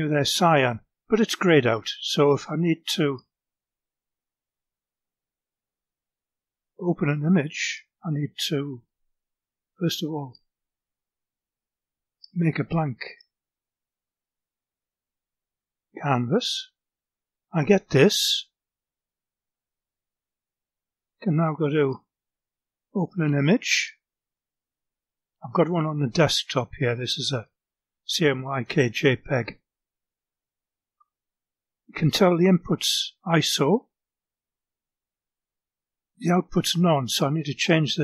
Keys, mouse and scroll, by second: 0.7 click, 2.3 click, 4.0 click, 5.1 4, 5.6 0, 6.7 click, 7.7 4, 8.2 0, 9.3 click, 11.6 click, 14.8 click, 21.2 click, 22.8 click, 25.1 click, 26.9 click, 29.1 click, 37.1 click.